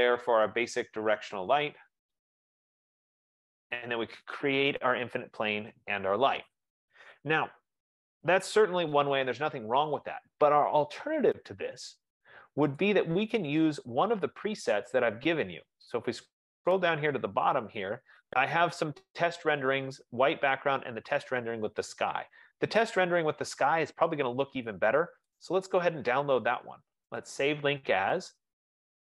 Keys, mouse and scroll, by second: 0.0 click, 1.8 click, 3.0-4.6 typing, 7.4-8.1 typing, 13.3 click, 15.1 click, 16.1-16.6 scroll, 16.6-17.6 scroll, 25.6 right click, 27.6 click.